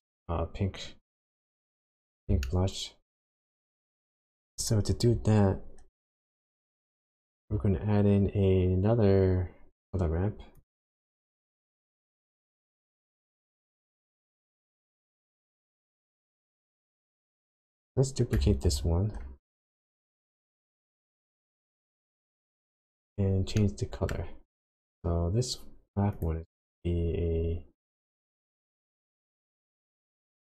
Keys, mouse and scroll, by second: 1.3 click, 1.7-2.1 scroll down 5, 2.4 shift+middle click, 4.6 click, 6.4 click, 6.8 shift+a, 17.2 click, 17.6 click, 18.6 shift+d, 20.6 click, 21.1-22.9 scroll up 10, 23.6 middle click, 24.3 scroll up 1, 26.1 click.